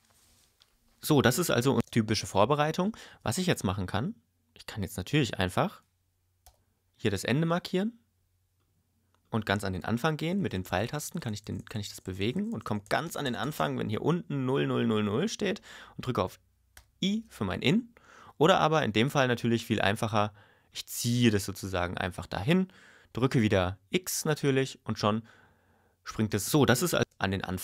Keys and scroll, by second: 1.8 space, 16.7 i, 26.3 space.